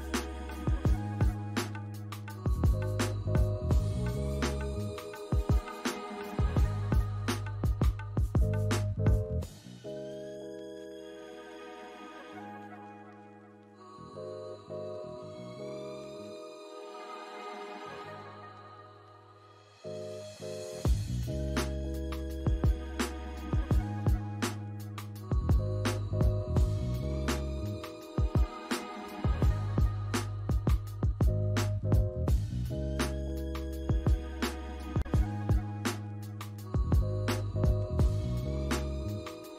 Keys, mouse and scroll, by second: 0.1 scroll down 1, 0.4 alt+click, 1.2-2.7 typing, 1.9 scroll up 1, 2.2 alt+click, 3.1 scroll up 1, 4.0 alt+click, 6.2 double click, 8.5 BackSpace, 13.6 alt+click, 14.6 double click, 15.1 alt+middle click, 15.6 alt+click, 16.5 scroll up 1, 16.8 alt+click, 18.1 alt+middle click, 18.6 alt+click, 20.0 ctrl+click, 24.3 ctrl+click, 30.1 ctrl+click, 32.6 double click, 32.9 scroll down 1, 33.4 alt+click, 34.0 scroll down 1, 34.7 scroll up 1, 34.8 scroll down 1, 35.4 alt+click, 36.9 alt+middle click, 37.3 alt+click, 38.0 alt+middle click, 38.4 alt+click, 38.9 alt+scroll down 1, 39.4 alt+scroll down 1.